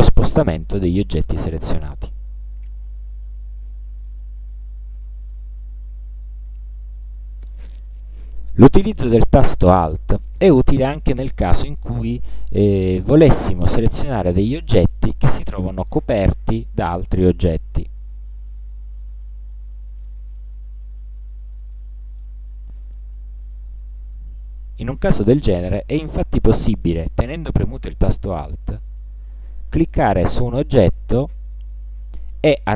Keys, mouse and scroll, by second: 4.0 shift+click, 5.3 shift+click, 7.0 shift+click, 17.3-19.4 drag, 21.2-21.9 ctrl+scroll up 4, 22.3 ctrl+click, 23.6-23.9 ctrl+scroll down 2, 24.2 ctrl+scroll up 2, 29.8 alt+click, 30.8 alt+click, 31.7 alt+click, 32.4 alt+click.